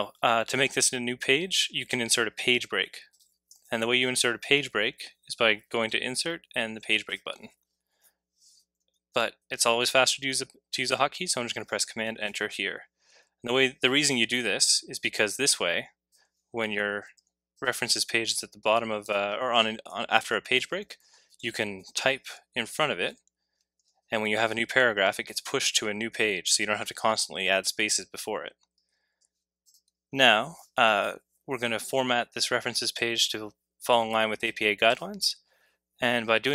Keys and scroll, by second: 8.9 super+z, 12.2 super+Return, 17.1 c, 20.2 Return, 21.3 v, 21.8 v, 22.2 v, 23.1 v.